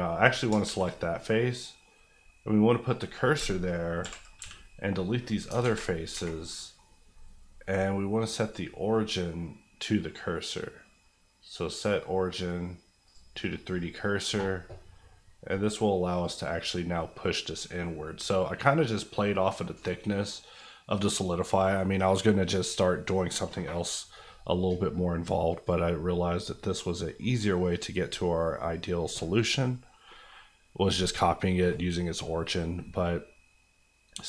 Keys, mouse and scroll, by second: 0.5 shift+middle click, 0.6 shift+s, 2.8 click, 3.4 ctrl+click, 4.0 ctrl+i, 4.4 x, 5.2 click, 5.4 alt+click, 5.6 alt+z, 6.1 Tab, 6.3 middle click, 8.4 click, 13.7 middle click, 15.5 click, 26.0-34.2 middle drag.